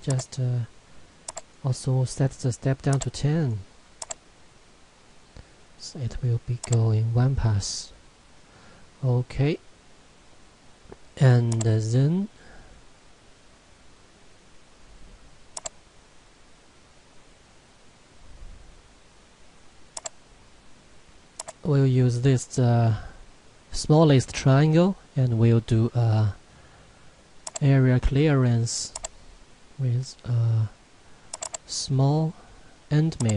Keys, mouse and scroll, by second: 3.2 click, 9.1 click, 11.5 click, 15.6 click, 20.0 click, 27.5 click.